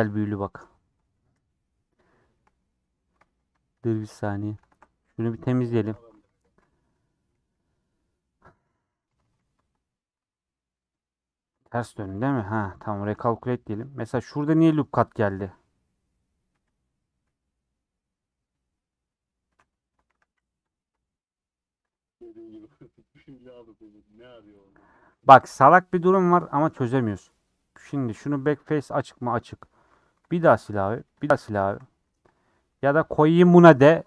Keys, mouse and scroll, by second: 0.1 ctrl+z, 0.5 scroll down 3, 0.7 middle click, 1.3 /, 1.9 /, 2.3 middle click, 2.5 scroll up 2, 2.9 middle click, 3.2 alt+z, 3.5 alt+z, 3.7 middle click, 5.3 middle click, 5.7 alt+z, 6.1 alt+z, 7.3 alt+z, 7.8-9.2 alt+z, 9.3 alt+z, 9.8 scroll up 2, 10.1 Tab, 10.2-10.6 scroll down 4, 10.6 middle click, 11.4 Tab, 12.7 alt+n, 13.0-14.3 shift+middle drag, 14.3 alt+click, 14.6 g, 15.4 s, 16.5 s, 17.4-20.1 middle drag, 20.1 a, 21.5-29.7 middle drag, 29.7 3, 29.9 alt+Left, 30.2 middle click, 31.2 alt+shift+click, 31.6 ctrl+x, 32.1 ctrl+z, 32.4 middle click, 32.8 Tab.